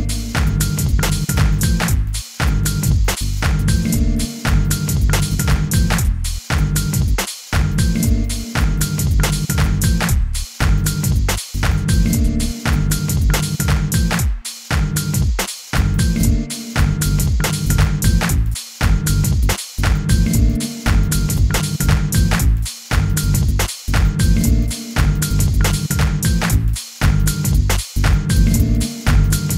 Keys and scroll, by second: 0.0-1.3 typing, 2.8 u, 3.9 g, 4.4 u, 6.0 g, 6.5 u, 10.0 f, 10.5 u, 12.1 f, 12.6 u, 15.7 u, 18.2 k, 18.8 u, 20.3 k, 20.8 u, 22.3 k, 22.9 u, 24.9 u, 26.5 k, 27.0 u, 28.5 k, 29.0 u.